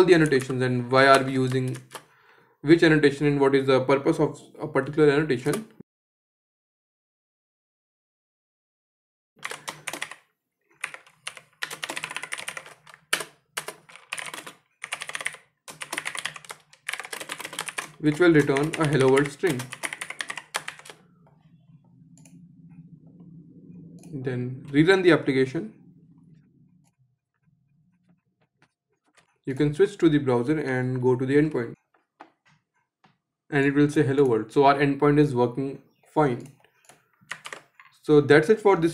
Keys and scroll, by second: 1.1 ctrl+shift+Return, 12.5 Return, 23.4 shift+F10.